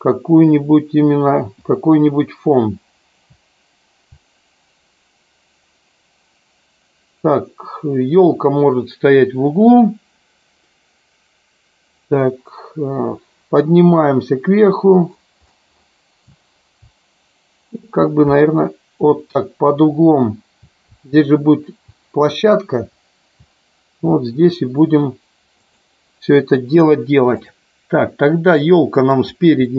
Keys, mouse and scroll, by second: 1.6-2.8 Left, 13.8-16.0 Up, 16.8 Down, 18.3 Right, 20.2 Left, 20.9 Left, 22.8 Up, 25.6 click, 27.4 click, 28.6-29.1 middle drag, 29.6 middle click.